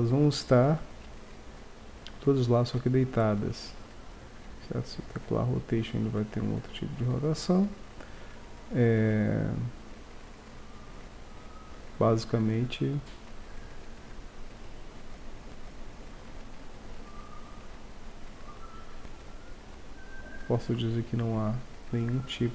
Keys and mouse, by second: 2.2-5.6 drag, 16.8-21.0 drag, 21.0-22.5 middle drag.